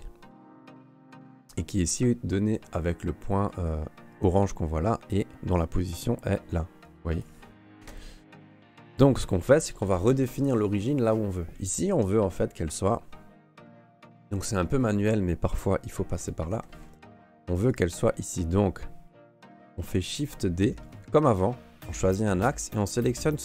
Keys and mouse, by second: 1.1 n, 6.6 click, 7.8 ctrl+z, 8.9 n, 11.6 right click, 11.9 Tab, 15.5 ctrl+r, 17.0 ctrl+Tab, 18.3 right click, 20.2 shift+d.